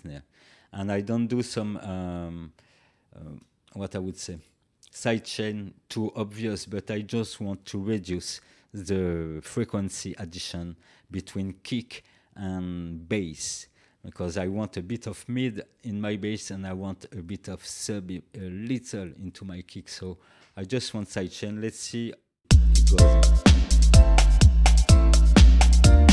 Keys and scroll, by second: 2.2 space, 22.4 space.